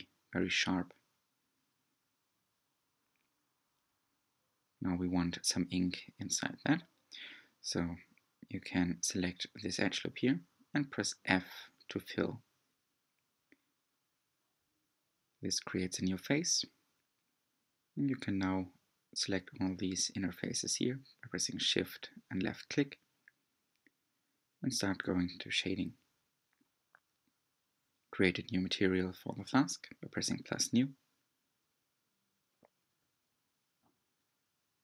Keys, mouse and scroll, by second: 1.8 alt+z, 4.1-5.5 scroll up 4, 5.5-6.1 scroll down 1, 6.1-9.5 middle drag, 9.5 alt+click, 12.5 f, 14.8 3, 17.6 alt+shift+click, 19.3 alt+shift+click, 20.0-21.6 middle drag, 21.6 shift+click, 22.2 shift+click, 22.9 shift+click, 23.5 shift+click, 24.5-27.5 middle drag, 29.5 click, 30.3-30.6 scroll down 3, 31.0-31.5 middle drag, 31.5-32.1 scroll down 4, 32.1-34.5 shift+middle drag, 34.5-34.8 drag.